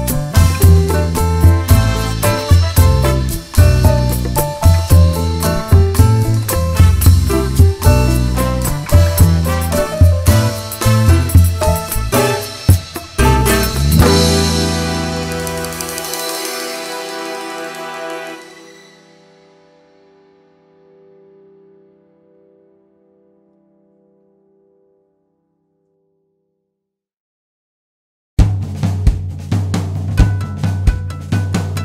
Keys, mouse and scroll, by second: 0.6-0.9 scroll up 1, 1.9-2.3 scroll down 1, 3.6 click, 4.8 ctrl+click, 5.2 g, 6.4 click, 6.6 scroll down 1, 6.7 `, 7.3 Tab, 7.6 `, 9.7 alt+click, 10.2 click, 10.3 `, 13.5 ctrl+click, 14.1 click, 15.6 g, 16.1 click, 18.0 click, 18.7 `, 18.8 scroll up 1, 19.0 `, 20.1 `, 20.6 g, 21.1 click, 21.2 `, 21.4 scroll up 1, 21.7 click, 22.2 g, 24.3 Tab, 25.2 click, 25.7 scroll down 1, 25.9 `, 27.2 `, 28.2 scroll up 1, 28.4 `, 28.8 scroll up 1, 29.0 `, 29.6 click, 30.9 ctrl+z, 31.1 ctrl+click.